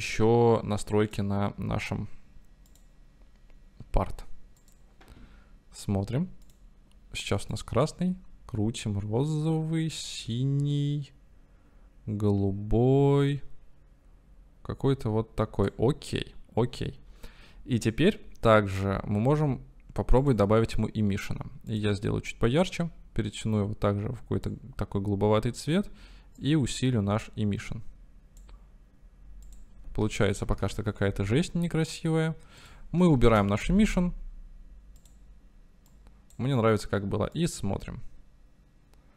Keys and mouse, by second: 0.0 right click, 3.1 click, 4.7-5.2 drag, 6.4 click, 26.6-28.7 drag, 29.6-32.0 drag, 32.6-33.8 drag, 35.0 drag, 37.7-38.2 drag, 38.2-39.1 right drag.